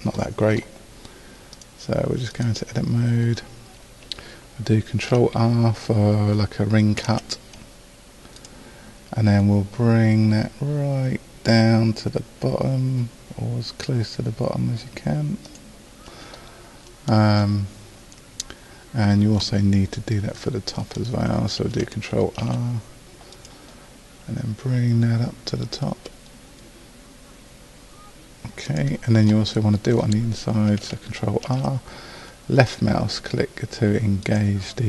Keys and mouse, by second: 7.0 ctrl+r, 19.4 middle click, 20.8-22.4 middle drag, 22.4 ctrl+r, 29.4-31.5 middle drag, 31.5 ctrl+r.